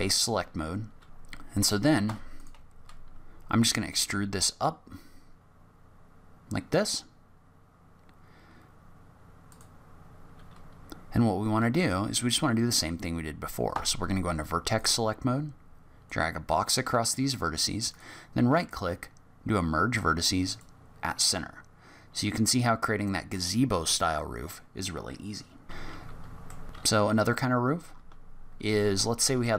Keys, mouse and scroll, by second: 1.0 ctrl+z, 2.0 3, 2.3 click, 3.9 e, 13.6 1, 14.7 click, 17.9 right click, 21.3 middle click, 25.8-26.3 scroll down 8, 25.8 Tab, 26.3 middle click.